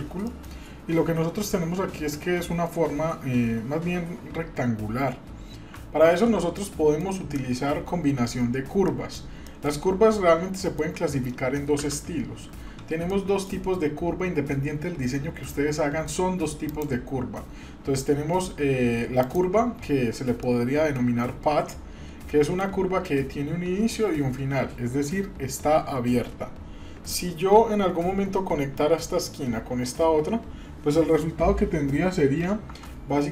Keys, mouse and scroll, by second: 0.2 middle click, 6.1 ctrl+z, 6.5-7.0 middle drag, 8.9-9.2 middle drag, 9.8 shift+middle click, 10.0 scroll down 1, 10.6 shift+middle click, 11.7 KP_7, 13.1-13.6 shift+middle drag, 16.7-19.3 drag, 20.4-21.1 shift+middle drag, 21.7-22.1 scroll up 3, 22.4-22.8 shift+middle drag, 32.7 Tab.